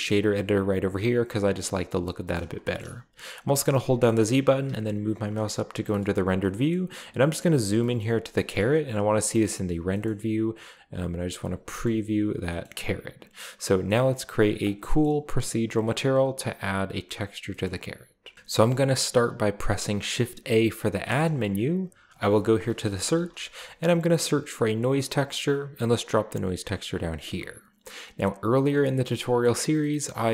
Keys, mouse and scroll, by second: 0.2 middle click, 1.0 click, 1.7 middle drag, 2.4 shift+middle click, 2.7 shift+scroll up 2, 3.4 middle click, 3.4-3.8 scroll up 1, 3.8-4.5 z, 6.0-6.5 shift+middle drag, 6.2-9.5 shift+scroll up 1, 6.7-7.5 middle drag, 6.7 typing, 7.7 shift+middle click, 8.0-8.4 shift+middle drag, 8.6 shift+middle click, 9.2 typing, 9.5 shift+middle click, 10.1-10.6 middle drag, 11.1 click, 11.7 shift+middle click, 12.4-13.1 scroll down 2, 13.5-14.3 scroll down 2, 14.4 click, 14.8 click, 14.8 click, 17.5 middle click, 18.3-18.9 middle drag, 21.1 shift+a, 22.1 click, 22.9-23.4 typing, 25.5 click, 27.3 click, 30.0-30.3 middle drag.